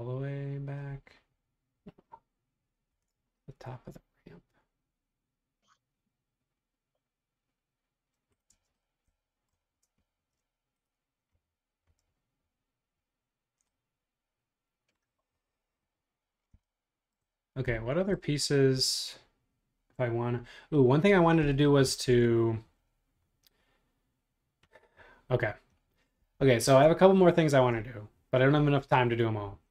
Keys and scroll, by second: 2.9 super+Tab, 8.6 space, 26.6 super+Tab.